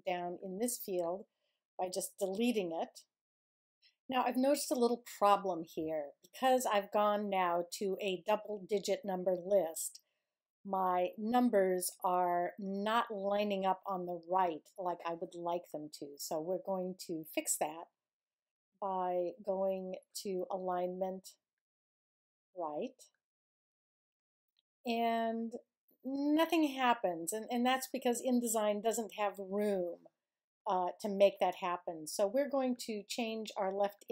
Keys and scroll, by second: 1.8 BackSpace.